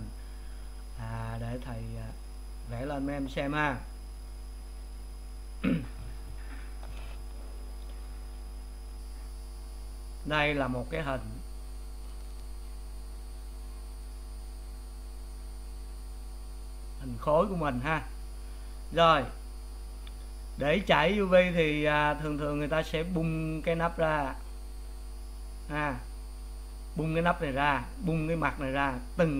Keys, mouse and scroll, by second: 2.4-29.3 drag.